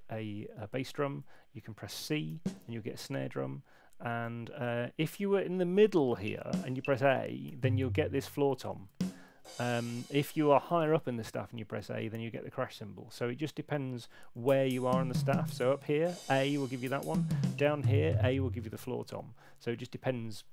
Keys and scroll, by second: 0.8 Left, 4.2 c, 4.2 Left, 6.1 Down, 6.4 Up, 7.4 a, 8.4 super+z, 8.8 Up, 9.2 a, 14.3 Down, 15.8 a, 16.7 Down, 17.9 a, 19.1 super+z, 19.5 super+z, 19.9 super+z, 20.3 super+z.